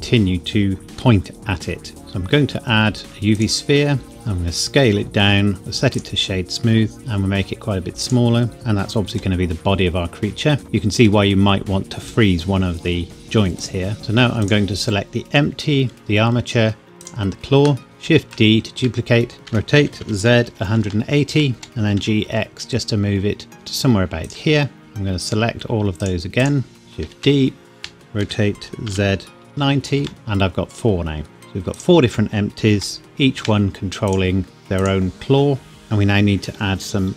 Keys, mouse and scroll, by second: 0.9 g, 2.0 Escape, 3.3 click, 4.0 scroll down 1, 5.6 right click, 5.9 click, 6.9 s, 8.0 click, 9.1 g, 11.0 Escape, 13.6 click, 14.0 middle click, 14.4 click, 16.0 shift+click, 17.8 KP_7, 18.0 shift+d, 18.8 Escape, 19.4-22.0 typing, 21.3 KP_Enter, 24.8 shift+Num_Lock, 24.8 middle click, 25.2 shift+click, 26.8 KP_7, 27.0 shift+d, 27.8 Escape, 28.2 r, 28.8 z, 29.4 KP_9, 29.5 KP_0, 30.0 KP_Enter, 30.1 middle click, 31.7 click, 32.7 g, 33.4 Escape, 34.0 click.